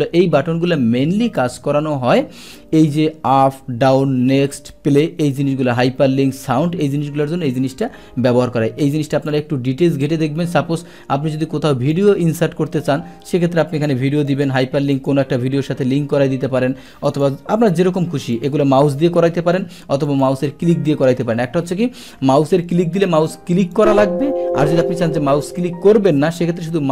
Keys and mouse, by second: 1.4 click, 2.8 click, 9.1 click, 10.0-11.9 drag, 14.3-15.1 drag, 17.1 click, 18.3 click, 20.1 click, 23.7 click.